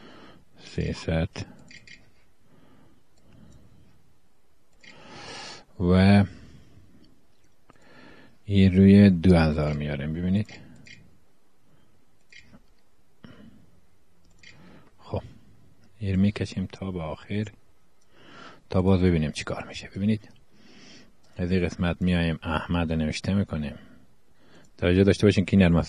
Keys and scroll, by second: 0.5-2.3 typing, 4.7 BackSpace, 9.4-11.0 typing, 12.4 0, 13.7 =, 13.8 \, 13.9 Return, 14.7 BackSpace, 22.8 Page_Up, 22.9 ., 23.0 ,, 23.1 space, 25.8 Page_Down.